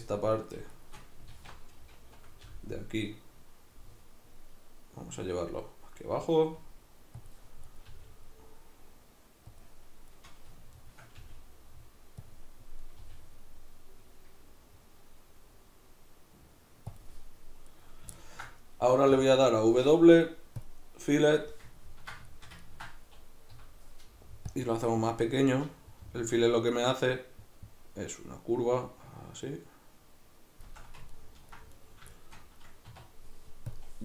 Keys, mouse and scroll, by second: 0.3 right click, 1.3 alt+q, 2.5 g, 7.3 click, 7.6 right click, 7.9 g, 9.6 click, 10.1 right drag, 10.7 shift+right click, 11.2 g, 12.3 click, 12.9 right click, 13.0 g, 17.0 click, 17.7 right click, 18.2-31.7 ctrl+middle drag, 19.1 w, 23.5 F9, 31.7 right click, 32.1-34.0 shift+middle drag, 32.9 w.